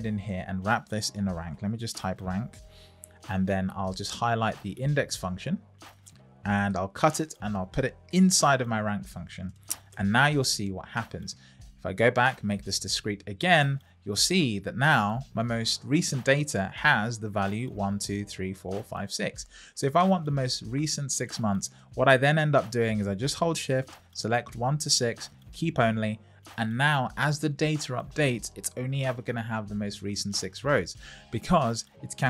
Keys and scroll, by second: 1.3 shift+r, 2.7 shift+9, 3.0 shift+0, 6.6 super+x, 8.1 super+v, 9.9 Return.